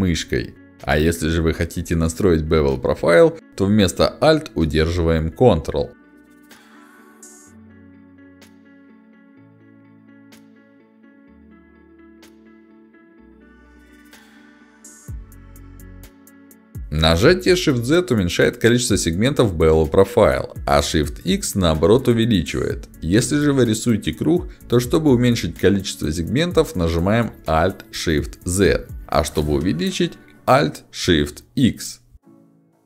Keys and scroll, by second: 16.4 y, 19.0 shift+z, 20.2 shift+x, 21.0 shift+z, 22.0 shift+x, 22.9 shift+z, 24.8 alt+shift+z, 32.5 alt+shift+x.